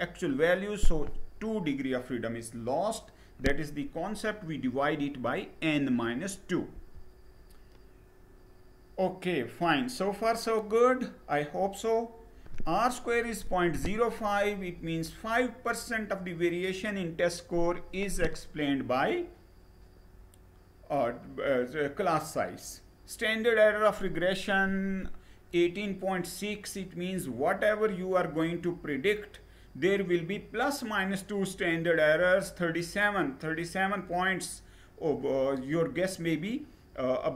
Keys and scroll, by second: 6.3 Page_Down.